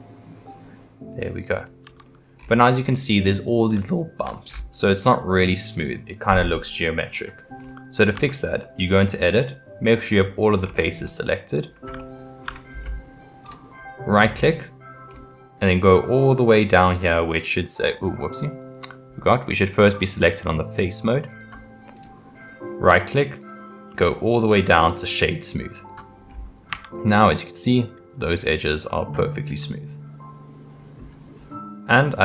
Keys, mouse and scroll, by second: 1.8 Tab, 2.4-3.7 scroll up 4, 3.7 scroll up 1, 3.8-4.5 shift+middle drag, 4.5-5.0 scroll up 5, 5.0-7.1 middle drag, 7.1-8.2 scroll down 7, 8.2 Tab, 8.6-10.6 middle drag, 10.6-11.0 scroll down 4, 11.0-13.5 middle drag, 13.5-16.7 right drag, 21.3 click, 22.0-25.2 right drag, 26.3 scroll up 3, 26.7 Tab, 27.1-30.1 middle drag, 31.9-32.2 scroll down 3.